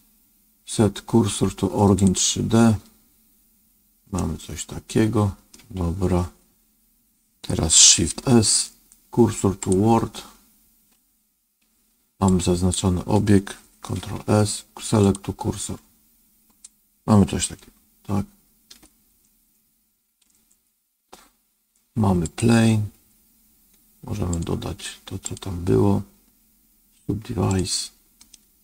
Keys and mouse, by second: 4.1-5.5 middle drag, 8.0 shift+s, 12.2 click, 13.9 shift+s, 17.5-18.8 shift+middle drag, 19.1 middle click, 22.1 click, 24.3 click, 25.1-27.5 drag, 28.2-28.6 middle drag.